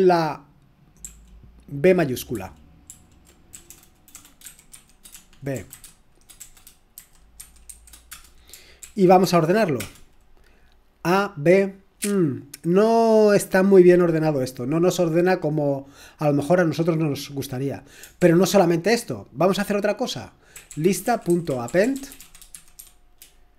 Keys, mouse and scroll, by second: 1.0 ctrl+p, 2.3 ctrl+p, 2.9 ctrl+p, 3.5-5.7 typing, 7.4 typing, 8.1 Return, 8.8 ctrl+p, 9.2 ctrl+p, 9.8 Return, 18.2 ctrl+l, 20.3-23.3 typing.